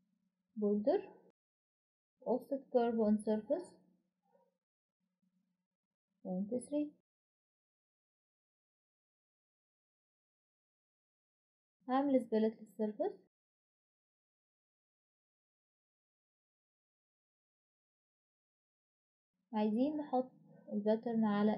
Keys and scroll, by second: 2.1 typing, 4.9-7.3 typing, 19.1-21.2 typing.